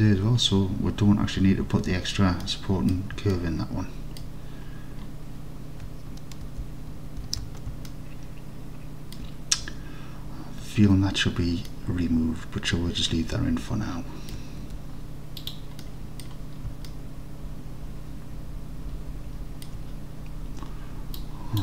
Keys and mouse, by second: 2.5 middle click, 3.5 alt+click, 6.5 alt+z, 7.3 alt+z, 8.0-9.2 alt+drag, 11.8-14.4 alt+drag, 14.7 Tab, 15.5 click, 15.9-16.3 middle drag, 16.9 alt+middle click, 17.5-18.8 alt+middle drag, 19.2 alt+click, 19.5 alt+click, 19.6 alt+click.